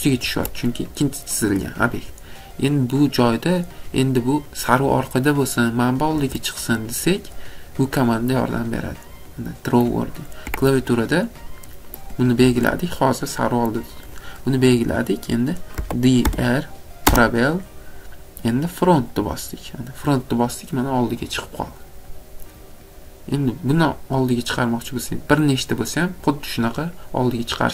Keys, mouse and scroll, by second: 0.3 Escape, 3.6 click, 6.1 Escape, 6.8 click, 7.4 middle click, 8.8 middle click, 8.9 middle click, 10.2 middle click, 10.3 scroll, 10.5 Escape, 10.9 middle click, 11.0 scroll, 12.2 click, 12.7 Escape, 13.9 scroll, 14.2 click, 15.7-16.4 typing, 16.2 scroll, 19.1 click, 21.3-21.8 scroll, 21.8 middle click, 22.1 middle click, 22.3 middle click.